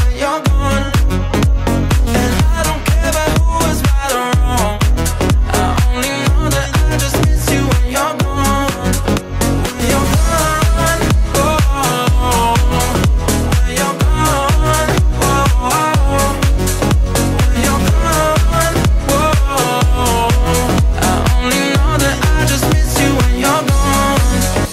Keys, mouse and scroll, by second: 0.9 ctrl+z, 1.9-6.2 drag, 8.3 click, 10.1 click, 10.7 click, 12.7 click, 13.5 click, 15.0-17.1 drag, 17.1 middle click, 17.7 scroll down 4, 18.0-19.3 middle drag, 19.3 click, 22.7-23.1 drag, 23.5 middle click, 24.0 scroll down 1, 24.3-24.7 middle drag.